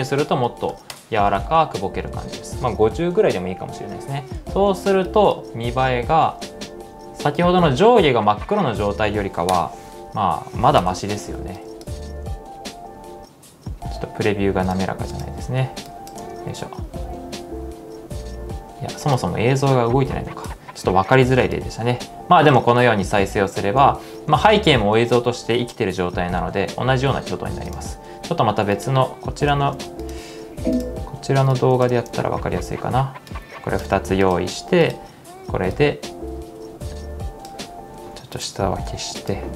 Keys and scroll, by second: 0.0-1.5 typing, 5.5 space, 8.2 space, 9.5 Return, 10.8 Return, 11.9 space, 14.0 space, 16.2 space, 22.6 space, 23.8 space, 26.4-27.1 typing, 29.5 super+c, 32.0 super+v, 38.6-39.4 typing.